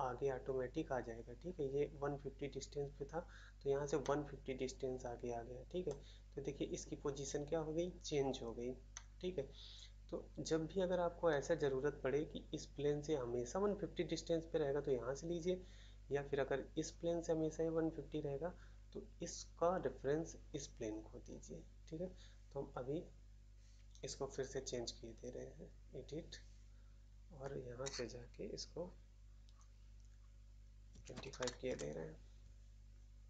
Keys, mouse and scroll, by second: 3.9 middle click, 5.8 middle click, 8.9 middle click, 11.2 middle click, 31.6 Return, 31.6 typing.